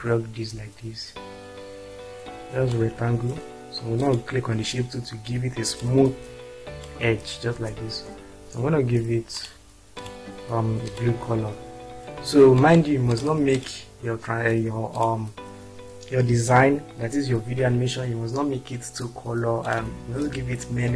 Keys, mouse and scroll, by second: 5.8-6.9 drag, 7.5 space.